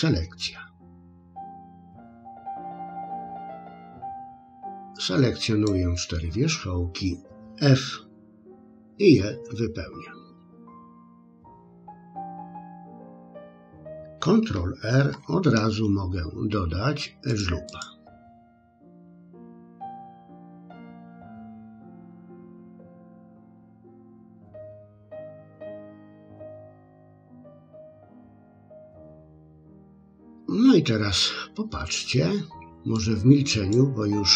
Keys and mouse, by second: 1.0 click, 3.3-5.7 drag, 8.4 f, 11.4-13.2 middle drag, 14.9 ctrl+r, 20.8 click, 21.9 click, 22.5 click, 23.3 click, 23.9 click, 24.2 click, 24.6 click, 24.9 middle click, 25.6 click, 26.0 click, 26.3 middle click, 27.8 click, 28.7 middle click, 29.6 middle click, 32.9 click.